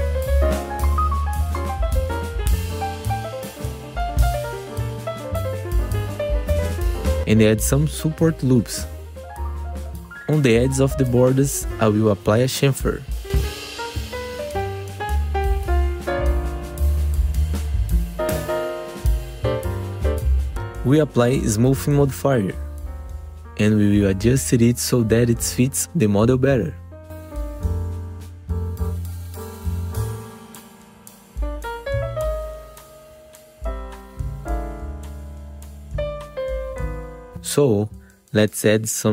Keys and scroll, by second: 1.5 f, 3.2 w, 3.8 F4, 6.6 ctrl+t, 7.2 alt+1, 9.5 F4, 11.0 ctrl+z, 14.7 ctrl+shift+c, 20.5 ctrl+Return, 21.1 ctrl+BackSpace, 21.4 2, 21.5 F4, 22.9 F4, 24.6 f, 24.9 F4, 27.1 F4, 28.3 r, 30.0 w, 30.2 F3, 35.3 F4, 36.5 z, 36.9 F3.